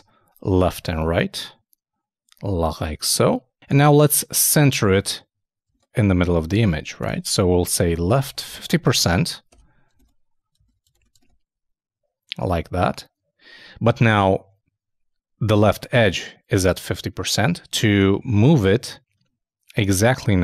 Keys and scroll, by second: 0.6 super+;, 0.8 super+s, 0.9 super+Tab, 5.7 super+Tab, 7.9-9.6 typing, 9.9 super+Return, 10.0 super+Tab, 10.9 super+s, 11.2 super+Tab.